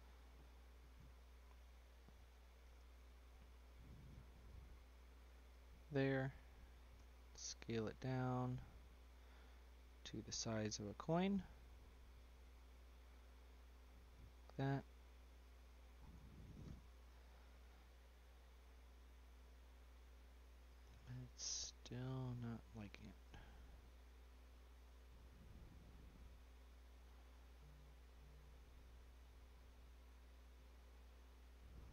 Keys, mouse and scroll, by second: 0.0 Tab, 0.9 Tab, 2.2 y, 6.9 s, 8.9 click, 11.3 click, 12.7 s, 14.7 click, 15.9-17.0 scroll up 7, 17.0 shift+click, 18.2 y, 20.2-23.2 middle drag, 23.2 click, 24.7 click, 26.0 click, 28.6 click, 30.9-31.9 drag.